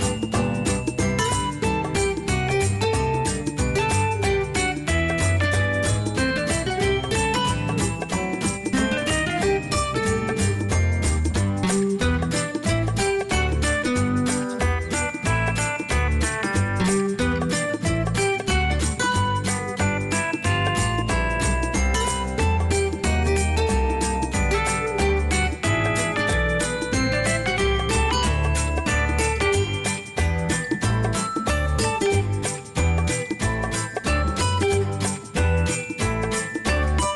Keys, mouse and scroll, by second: 6.3 click, 8.9 click, 13.0 click, 18.1 click, 22.4 right click, 25.7 click, 28.1 click, 32.9-36.3 drag, 34.4 space.